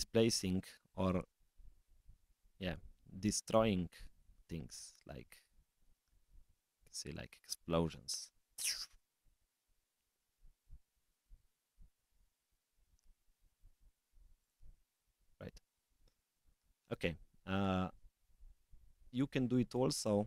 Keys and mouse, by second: 1.1 s, 3.3 middle click.